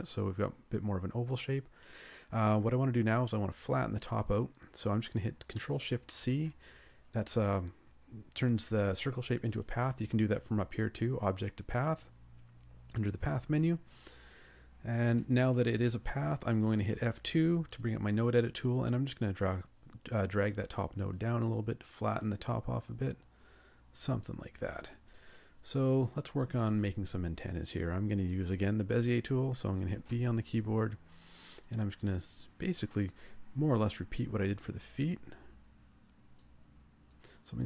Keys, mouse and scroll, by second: 6.1 ctrl+shift+c, 17.0 F2, 30.2 b.